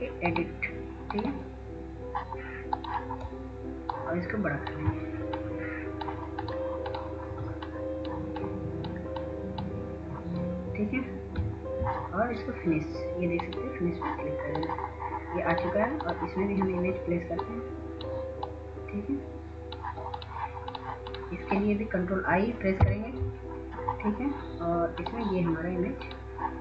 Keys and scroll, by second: 23.6 ctrl+i.